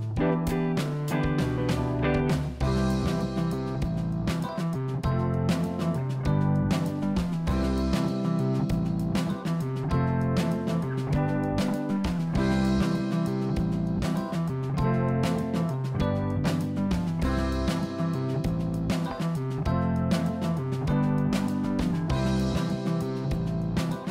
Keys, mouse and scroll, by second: 0.1 ctrl+j, 0.8 click, 1.4-3.1 middle drag, 3.2 ctrl+z, 3.4 ctrl+z, 3.7 click, 4.8 click, 6.3 click, 7.7 click, 8.5 shift+click, 10.1 ctrl+j, 10.9 click, 11.3 click, 15.0 click, 15.3-16.3 scroll up 2, 16.3-16.9 scroll down 2, 16.9-18.6 middle drag, 21.3-22.7 middle drag, 22.7 click.